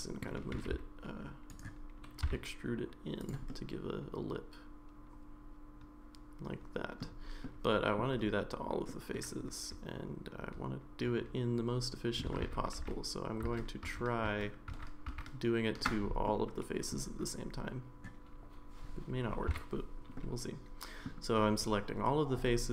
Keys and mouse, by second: 0.5 g, 2.2 e, 3.5-7.0 middle drag, 7.4 middle click, 8.9-12.2 middle drag, 12.4 ctrl+z, 12.8 ctrl+z, 13.9 ctrl+z, 14.3 ctrl+z, 14.7 ctrl+z, 15.1 ctrl+z, 16.3 middle click, 19.5 a, 20.2 middle click.